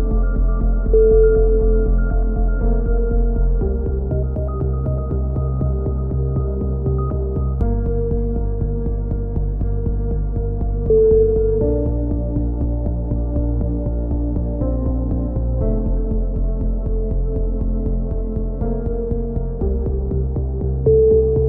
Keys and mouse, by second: 1.3 k, 4.4 a, 4.8-5.8 middle drag, 6.6-9.2 drag, 8.2 z, 9.9 z, 11.9 right click, 12.6 middle click, 13.0 right click, 13.8-14.9 middle drag, 14.6-15.6 right drag, 15.3-17.7 drag, 18.1 a, 18.1-19.2 middle drag, 18.4 z, 18.9 z, 20.6 ctrl+r.